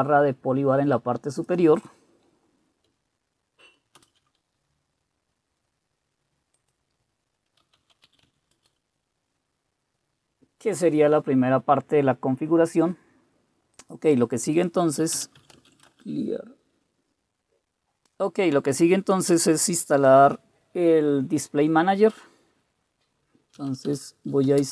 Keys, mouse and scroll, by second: 4.1 super+Return, 7.5-8.6 typing, 7.7 click, 8.6 Return, 15.1-16.3 typing, 15.3 click, 23.4-24.7 typing.